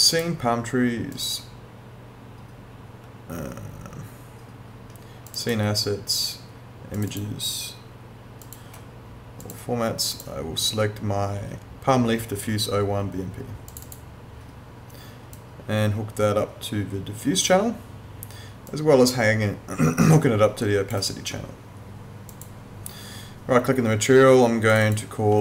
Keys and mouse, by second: 5.3 click, 13.7 click, 18.7 click, 22.3 click.